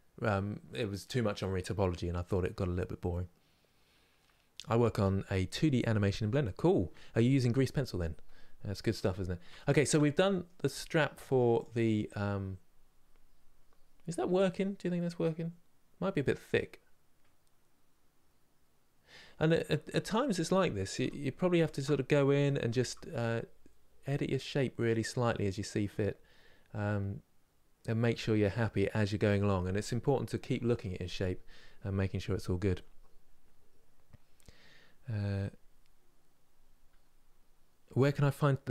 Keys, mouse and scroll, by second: 10.4-10.9 scroll down 4, 10.9 middle click, 11.3 click, 19.5-19.8 scroll up 2, 20.7 3, 21.4 alt+click, 22.4 s, 25.1-27.1 middle drag, 27.1 scroll down 2, 27.8-38.7 middle drag.